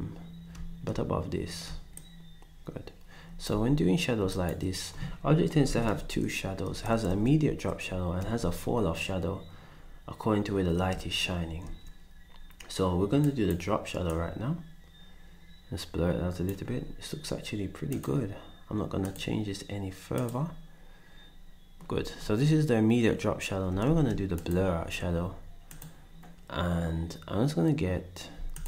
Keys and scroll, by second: 3.5 ctrl+z, 5.5 Up, 5.7 Up, 5.9 Up, 7.1 Up, 23.9 ctrl+s, 28.3 s.